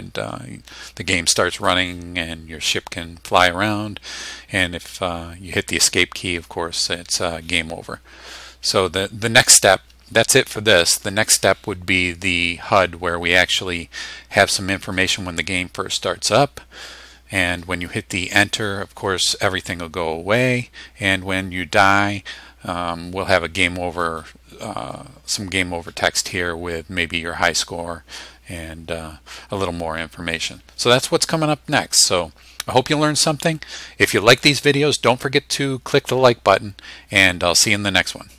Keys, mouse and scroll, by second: 5.7 Escape.